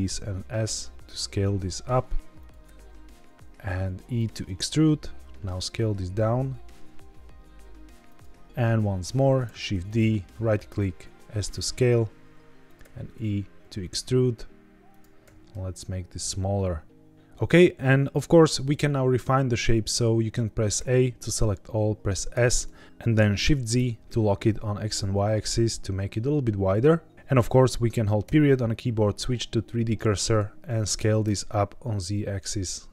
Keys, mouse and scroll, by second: 2.3 click, 2.6 e, 3.9 click, 4.4 s, 8.0 click, 9.4 shift+d, 9.8 right click, 10.6 s, 12.6 click, 12.7 e, 14.8 click, 15.2 s, 17.1 click, 17.6-17.9 scroll down 1, 20.7 a, 22.2 s, 23.7 shift+z, 27.1 click, 28.2 ., 30.9 s, 31.1 z.